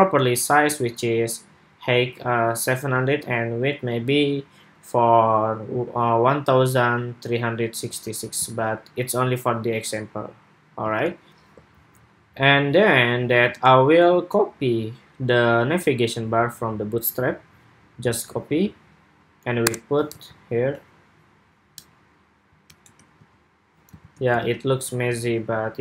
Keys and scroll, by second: 8.2 super+Tab, 10.7 super+Tab, 13.4 super+Tab, 19.9 super+v, 23.7 super+s, 24.1 super+Tab.